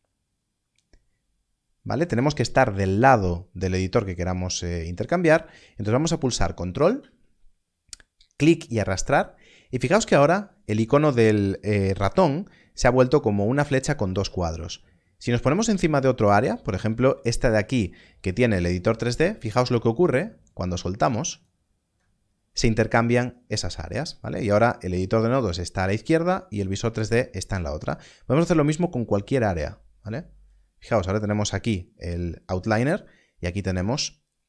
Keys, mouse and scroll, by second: 6.9 click, 8.4 ctrl+click, 28.7 ctrl+click.